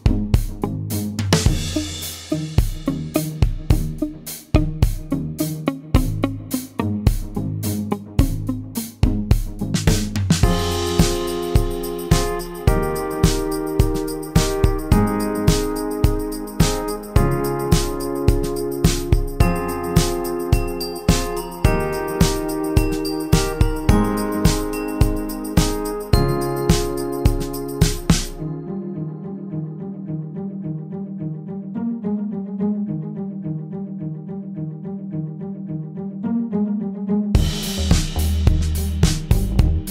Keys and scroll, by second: 6.2 g, 12.5 F1, 12.8-14.2 typing, 23.5-24.1 typing, 25.9 space, 27.5 shift+F6, 30.3 F1, 31.7-32.0 typing, 32.9 ctrl+d, 35.6 ctrl+d, 37.6-38.2 typing, 39.4 ctrl+d.